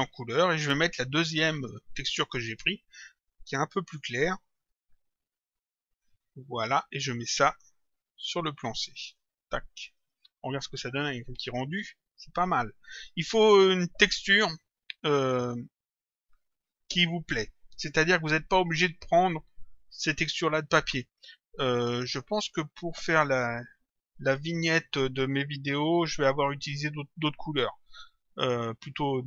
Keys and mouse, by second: 1.8 click, 4.4 click, 5.8 click, 7.4 click, 10.0 middle click, 11.1 click.